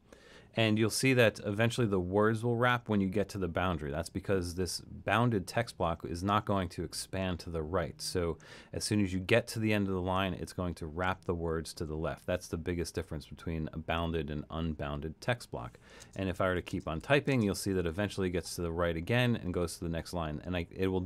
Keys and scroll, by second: 0.0-0.2 typing, 16.0-20.0 typing.